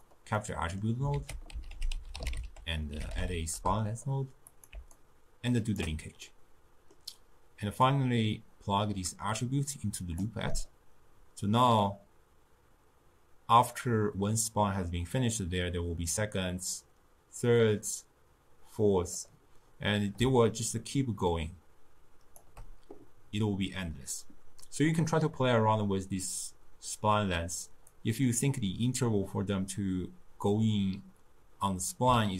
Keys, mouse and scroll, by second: 0.4 middle click, 1.2 ctrl+a, 5.0-6.3 alt+right drag, 6.3-7.9 middle drag, 7.9 click, 11.7-14.7 drag, 20.4-23.5 shift+drag, 28.0 click.